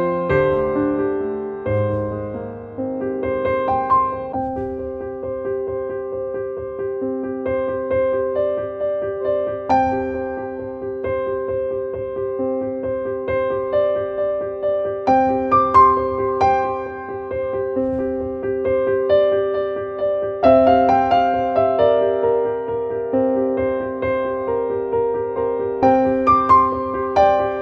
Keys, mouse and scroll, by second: 0.0 click, 2.3 click, 3.7 click, 5.5 click, 7.4 click, 8.5 click, 9.8 click, 11.0 click, 12.6 right click, 13.1 click, 14.0-15.2 drag, 16.8-20.0 drag, 20.0 click, 21.3 click, 24.0 click, 25.1 click, 26.1 click, 26.7 click.